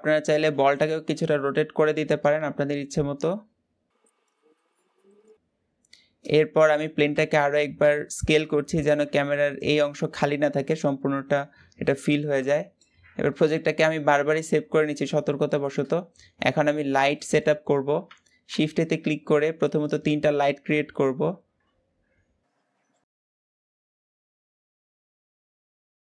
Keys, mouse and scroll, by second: 0.3 r, 4.2 r, 5.2 r, 6.1 click, 6.9 s, 12.3-12.7 shift+middle drag, 12.7-13.1 scroll up 1, 13.1 shift+middle click, 13.5 ctrl+s, 14.1-14.9 scroll up 1, 14.9-15.3 scroll down 1, 15.3-15.7 shift+middle drag, 15.7-16.1 scroll down 1, 16.1-16.5 middle drag, 16.5-16.9 scroll down 4, 16.9-23.4 shift+middle drag, 23.5 middle click, 23.9-26.0 typing, 24.3 shift+middle click.